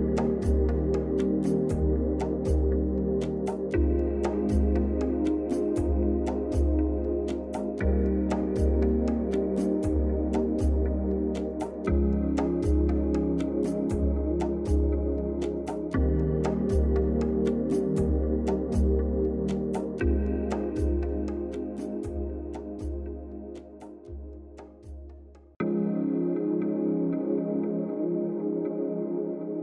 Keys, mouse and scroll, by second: 3.9 click, 4.8 click, 7.6 right click, 8.6 click, 15.9 click, 17.2 right click, 18.2 click, 25.4 click, 28.1-29.6 typing.